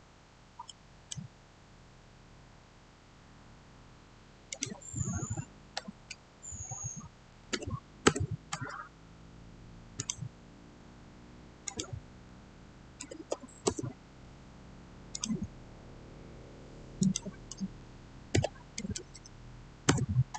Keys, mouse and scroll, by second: 0.6-2.1 middle drag, 2.1-3.2 scroll down 1, 4.4 click, 7.0-7.9 typing, 7.9 Return, 9.9 click, 12.6-13.6 typing, 15.0 click, 18.2-19.0 typing, 19.8 Return.